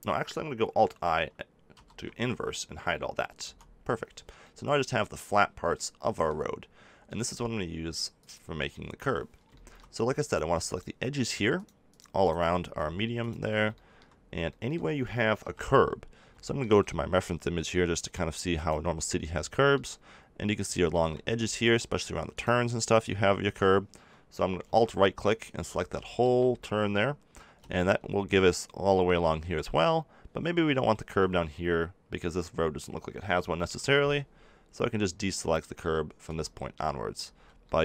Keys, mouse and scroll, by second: 1.7 ctrl+i, 3.4 h, 8.1 click, 10.2-11.2 right drag, 11.4-13.7 right drag, 13.7-15.1 middle drag, 15.3 KP_7, 16.4 middle click, 19.4 click, 19.4 middle click, 19.6 click, 19.6 middle click, 20.7 middle click, 24.7 click, 25.7 middle click, 29.5-31.5 middle drag, 33.5 b, 36.2 b, 37.2 b.